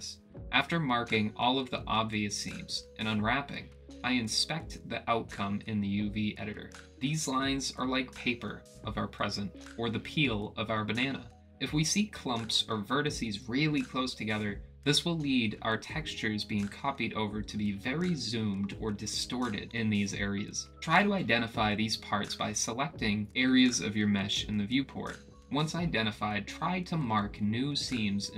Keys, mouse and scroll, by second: 15.1-16.8 middle drag, 21.3-22.9 drag, 23.5 click, 24.4 click, 25.4 middle click, 26.0 click, 27.7 click, 28.2 a.